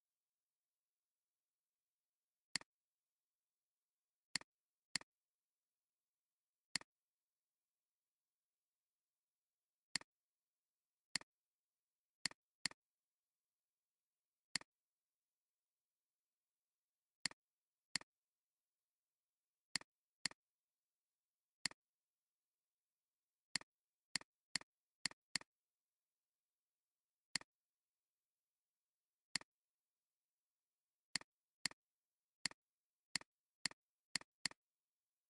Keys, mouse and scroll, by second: 5.5-6.9 drag, 12.2 double click, 20.2 double click, 20.6 alt+scroll up 1, 21.4 alt+scroll up 1, 22.4 alt+scroll down 2, 24.4 space, 24.6 double click, 25.4 double click, 26.4 alt+scroll up 1, 27.2 space, 27.8-28.3 alt+scroll up 5, 29.3 space, 30.0-30.5 alt+scroll up 3, 31.0 space, 32.2 alt+scroll up 1, 33.0 space, 34.4 right click.